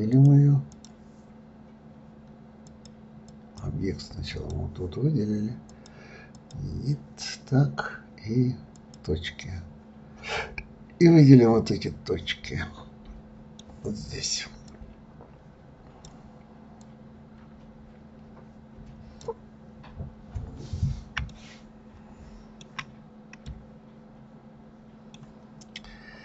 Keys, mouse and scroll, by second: 0.1 click, 0.7 click, 2.6-4.4 drag, 5.7-8.7 drag, 8.7 click, 10.7-11.2 scroll up 2, 11.2-11.6 scroll down 1, 11.6-14.6 middle drag, 14.6-19.6 drag, 19.6-20.0 scroll up 2, 20.0-21.2 scroll down 3, 21.2-25.7 shift+middle drag, 25.7-26.2 shift+drag.